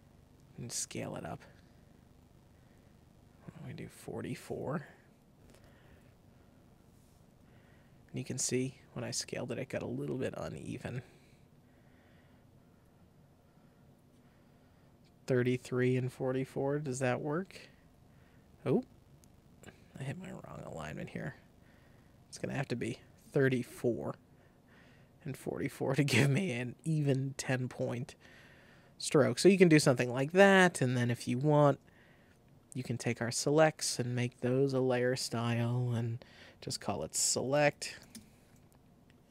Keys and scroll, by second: 5.0 shift+Down, 5.4 Right, 23.2 Escape, 36.5-38.4 typing.